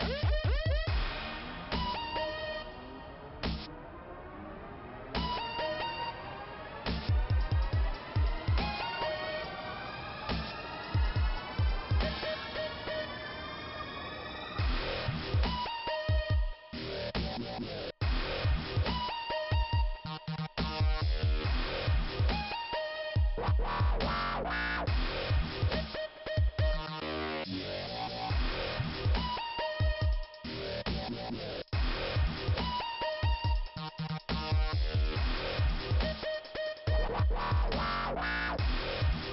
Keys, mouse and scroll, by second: 5.4 click, 6.2 click, 9.5 click, 13.1 right click, 14.2 click, 18.1 right click, 19.0 click, 20.6 click, 21.8 click, 22.0 click, 24.3 scroll up 2, 25.6 click, 27.3-28.0 scroll down 2, 28.0 scroll up 1, 28.1-28.7 scroll down 1, 28.7 scroll down 1, 28.8 scroll down 1, 30.9-31.3 scroll up 1, 32.4 click, 36.9 click, 37.1 click, 37.2 click, 38.7 click.